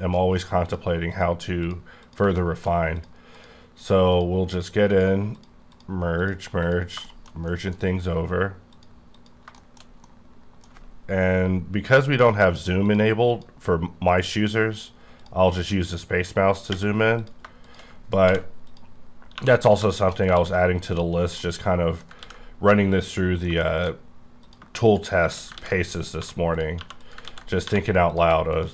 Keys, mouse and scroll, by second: 0.1 middle click, 0.2 middle click, 0.6 click, 1.1 click, 1.6 click, 2.0 click, 2.4 shift+middle click, 3.0 click, 3.3 click, 3.8 click, 4.1 click, 4.5 click, 4.9 click, 5.3 click, 5.7 click, 6.6 click, 7.0 shift+middle click, 8.7 click, 9.1 click, 9.6 shift+middle click, 12.8 click, 13.3 click, 15.2 click, 15.2 click, 17.2 click, 18.2 m, 18.7 click, 19.3 2, 19.6 click, 20.5 x, 20.9 click, 21.1 scroll down 4, 21.4 middle click, 22.2 ctrl+x, 22.4-22.7 scroll down 1, 22.7 middle click, 23.4 scroll down 1, 23.6 middle click, 24.4 click, 24.8 shift+click, 25.2 shift+click, 25.6 ctrl+x, 26.2 1, 26.5 click, 26.8 2, 27.0 click, 27.3 ctrl+x, 27.6 1, 28.1 click.